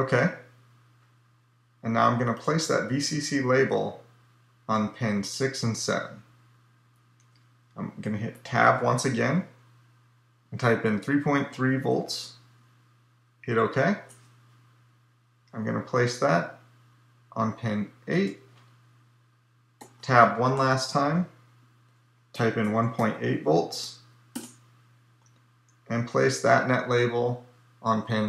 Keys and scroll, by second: 8.1 Tab, 19.8 Tab.